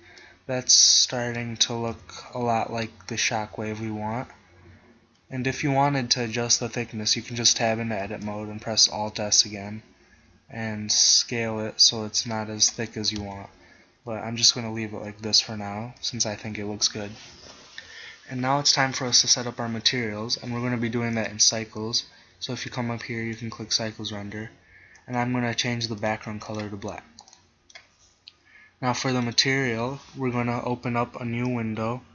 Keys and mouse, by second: 2.0 KP_1, 5.7 Tab, 8.1 alt+s, 13.7 Tab, 16.7-17.9 middle drag, 21.2-23.9 middle drag, 25.0-28.3 middle drag, 29.2-31.1 middle drag, 31.7 click.